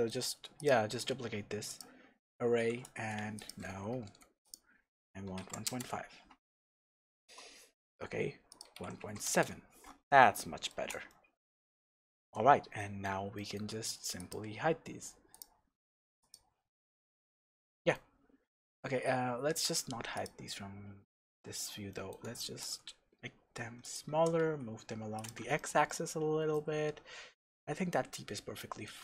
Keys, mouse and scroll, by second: 0.5-6.6 drag, 4.1 KP_Enter, 5.7 KP_Enter, 6.6-8.5 shift+middle drag, 8.5-10.3 drag, 9.4 KP_Enter, 10.3-14.1 shift+middle drag, 11.5-11.9 scroll down 2, 12.4-12.7 scroll up 2, 14.1 click, 15.3 click, 16.2 click, 16.9-19.5 middle drag, 19.5 click, 20.1 click, 20.4-23.9 middle drag, 21.5-21.9 scroll up 2, 22.5 s, 23.9 click, 24.1 g, 25.2 click, 25.5-29.0 shift+middle drag.